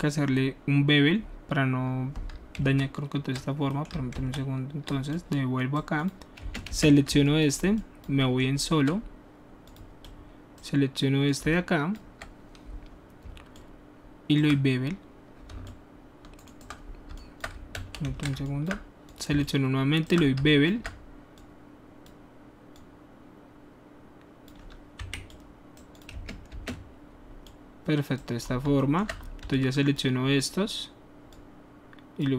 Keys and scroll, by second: 2.5 ctrl+z, 4.1 ctrl+z, 6.4 space, 6.6 space, 17.7 ctrl+alt+shift+z, 19.3 ctrl+alt+shift+z, 20.3 typing, 25.0 q, 26.1 space, 26.5 space, 29.4 alt+w.